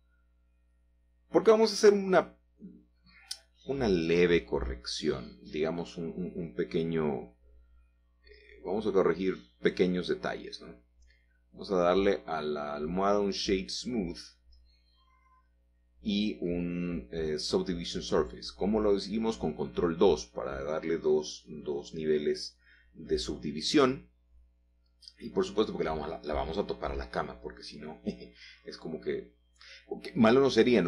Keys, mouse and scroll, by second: 0.5-1.5 shift+middle drag, 1.7 shift+middle click, 1.9 shift+middle click, 2.1 shift+middle click, 3.9-4.8 scroll down 2, 5.3 shift+middle click, 6.3 middle click, 8.0-8.5 scroll up 4, 8.5-9.7 shift+middle drag, 10.8 click, 12.3 click, 13.1 middle click, 15.6 ctrl+2, 16.6-17.2 scroll down 3, 17.2 scroll up 2, 17.3 scroll down 1, 17.5 scroll up 1, 18.3-21.3 shift+middle drag, 21.6-23.4 middle drag, 24.1 shift+middle click, 25.4 g, 26.0 z, 29.8 shift+middle click, 30.4-30.8 scroll down 1.